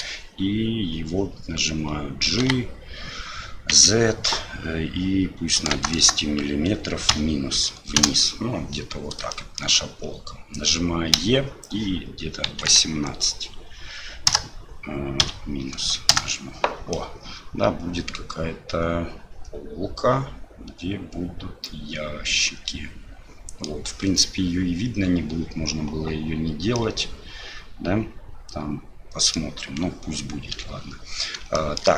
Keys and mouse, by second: 2.4 g, 9.3 shift+click, 11.1 e, 16.9-23.8 drag, 26.9-29.4 middle drag, 30.5 l, 31.5 shift+middle click.